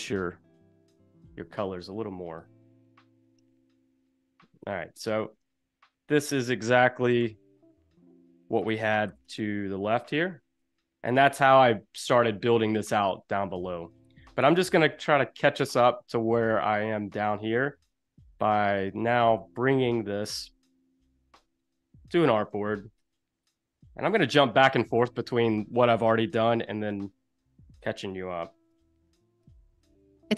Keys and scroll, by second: 3.4 i, 4.5 v, 4.9 space, 7.2 l, 9.0 v, 11.0 super+-, 11.3 space, 21.0 super+=, 21.4 space, 22.6 super+-, 26.3 super+g, 28.8 shift+o.